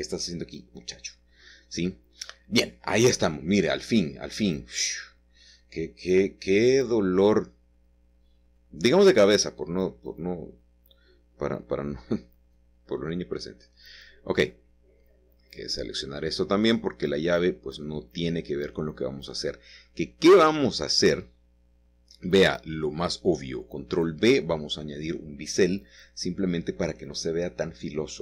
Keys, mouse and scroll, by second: 3.7-4.4 scroll down 1, 5.6-6.5 scroll down 1, 6.5-7.7 middle drag, 7.2-8.1 scroll down 1, 8.1-9.7 middle drag, 12.0-12.8 scroll up 1, 12.8-14.7 shift+middle drag, 13.3-13.8 scroll up 1, 14.9 c, 15.4-16.7 middle drag, 16.7 Escape, 17.1-18.2 scroll down 1, 22.6 ctrl+b, 24.1-25.3 scroll up 2, 25.7 click, 26.7-28.2 scroll down 2.